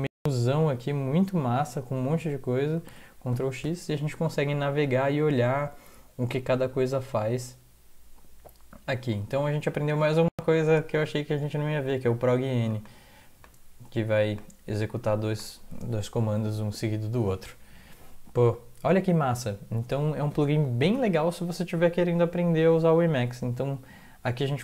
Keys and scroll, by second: 2.9 ctrl+x, 20.8 ctrl+x.